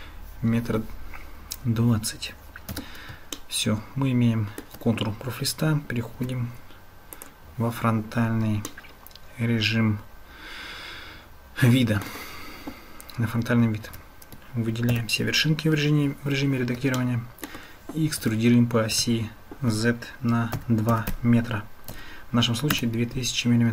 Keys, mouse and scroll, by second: 2.7 Tab, 3.4-4.7 shift+drag, 8.7-10.4 shift+drag, 10.4-10.8 shift+middle drag, 10.8 shift+click, 13.9 Tab, 14.9 a, 17.0 shift+click, 17.3 shift+middle click.